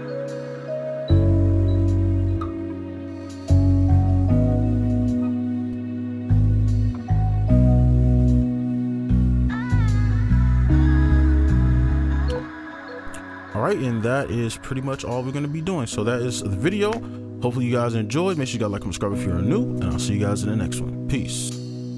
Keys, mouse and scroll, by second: 12.4 space.